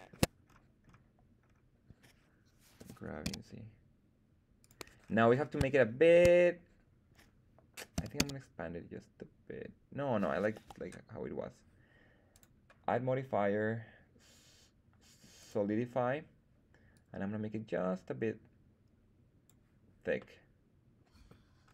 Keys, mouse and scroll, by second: 0.4-1.2 scroll up 2, 1.4-2.7 scroll down 2, 2.7 g, 3.2 z, 4.5 click, 5.0-5.7 scroll down 3, 5.7 shift+middle drag, 7.9 s, 8.1 z, 10.5 Escape, 12.2-15.5 drag, 16.8-19.5 drag, 20.1-21.2 middle drag, 21.6-21.7 scroll up 3.